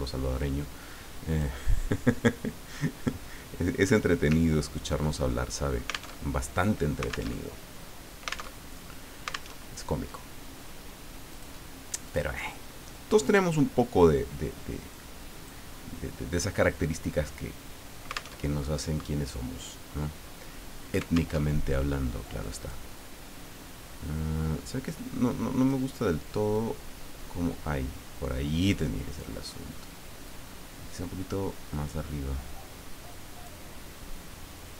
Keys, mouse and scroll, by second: 1.3 click, 4.5 ctrl+scroll down 2, 5.5 ctrl+click, 6.2 alt+Tab, 7.3 alt+Tab, 8.7 alt+Tab, 9.5 alt+Tab, 11.3 click, 12.0 click, 12.8-16.1 drag, 18.4 alt+Tab, 21.4 alt+Tab, 22.4 click, 24.9 click, 26.5-28.8 drag, 30.3-33.6 drag, 34.5-34.7 drag.